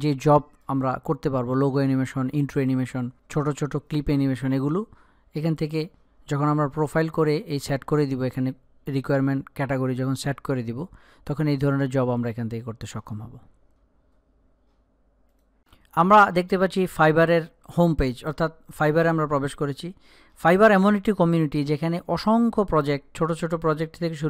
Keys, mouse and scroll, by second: 15.7 click.